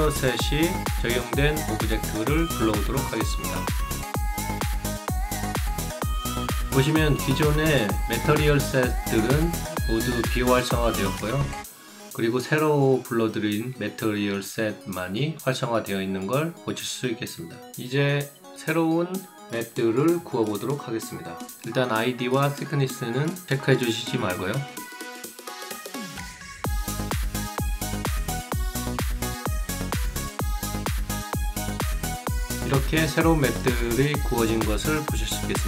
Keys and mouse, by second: 3.6 click, 6.2 click, 10.0-11.6 alt+drag, 11.8 alt+right click, 12.0 alt+middle click, 12.4 alt+click, 13.6 alt+click, 14.3 alt+middle click, 14.8 alt+click, 15.2 alt+middle click, 15.8 alt+click, 17.0-17.6 drag, 21.1 click, 23.0 click, 24.1 click, 27.5 click, 30.7 click, 33.6 click, 34.4 alt+click.